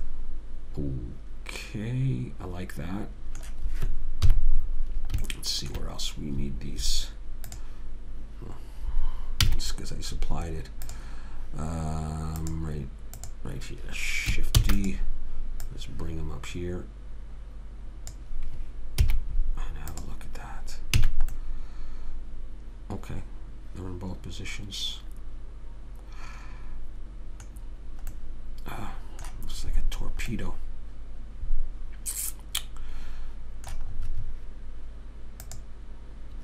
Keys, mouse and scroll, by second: 4.6 KP_3, 5.6 middle click, 7.9 click, 9.8 z, 12.8-14.9 drag, 14.9 shift+d, 19.4 z, 21.3 a, 28.6-30.3 middle drag, 30.8-32.4 middle drag, 35.6 middle click, 35.8 click.